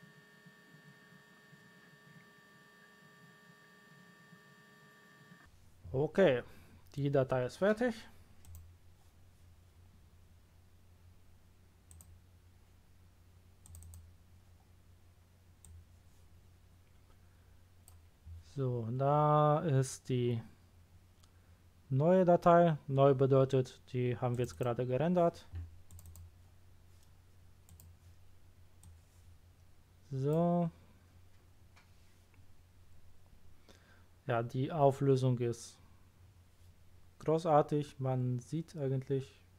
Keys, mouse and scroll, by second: 8.4 click, 11.9 click, 13.6 click, 13.8 click, 15.6 click, 24.3 click, 24.5 click, 25.9 click, 26.0 click, 27.7 click, 28.8-30.3 drag.